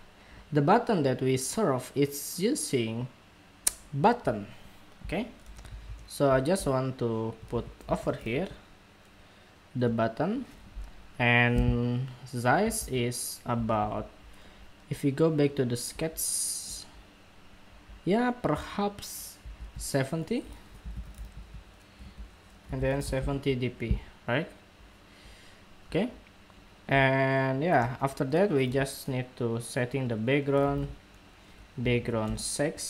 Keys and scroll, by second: 12.5 super+Tab, 13.3 super+Tab, 14.0 super+Tab, 19.2 super+Tab, 19.7 super+Tab.